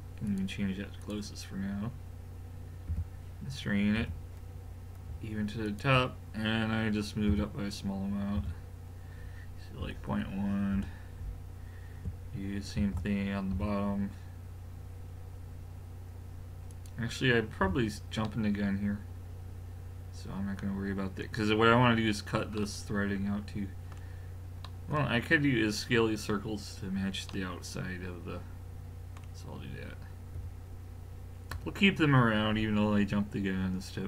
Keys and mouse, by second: 2.9 g, 7.3 g, 12.8 shift+d, 17.6 a, 19.2-20.1 middle drag, 22.6 middle click, 30.4 l, 31.5 l.